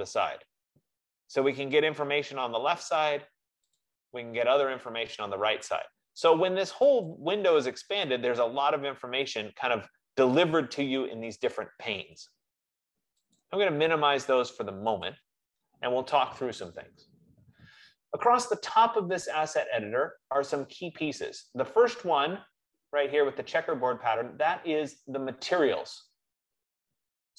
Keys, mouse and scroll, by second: 2.0 click, 3.9 click, 7.3 click, 11.2-12.4 drag, 13.7 click, 15.4 click.